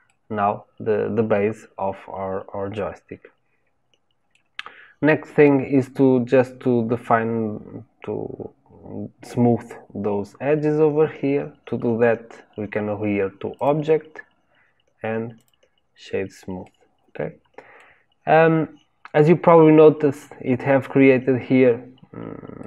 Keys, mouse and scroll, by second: 13.5-16.5 drag, 16.6-21.9 middle drag, 22.5-22.6 middle drag.